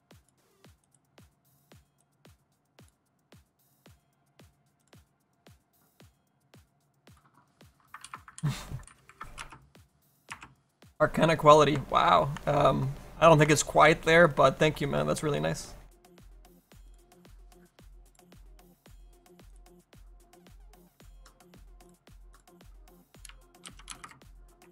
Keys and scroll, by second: 16.4 s.